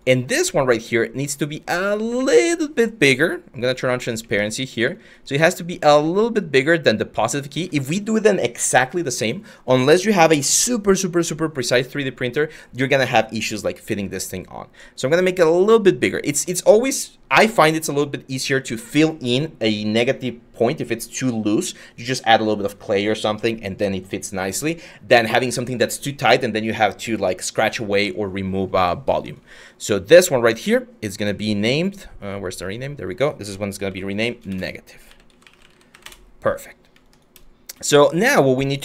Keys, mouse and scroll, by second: 28.4 q, 33.3-35.6 typing, 35.7 Return.